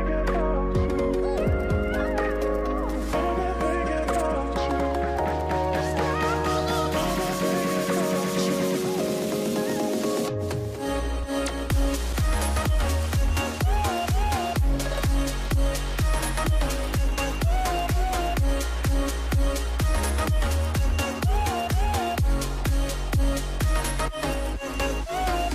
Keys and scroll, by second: 2.2-4.4 typing, 5.8 ctrl+z, 5.8-7.0 typing, 7.0 Return, 11.2 shift+Right, 11.3 shift+Right, 11.4 shift+Right, 13.2 v, 22.2-22.7 Up, 22.9-23.2 Down, 23.4 Down.